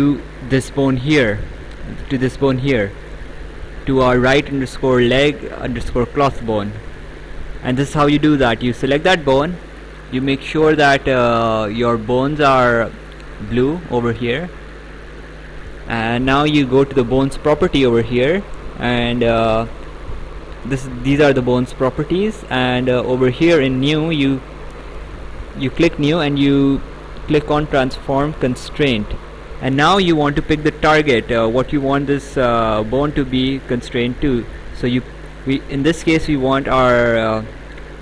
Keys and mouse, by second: 0.6 click, 2.3 click, 7.1 right click, 24.3 click, 28.9 click.